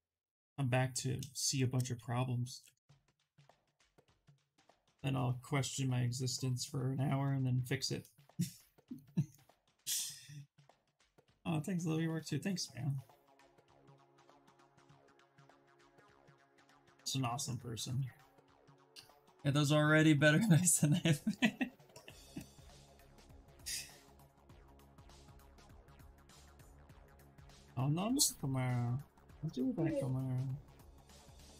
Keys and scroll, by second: 1.8 s, 28.1 ctrl+z, 28.3 ctrl+z.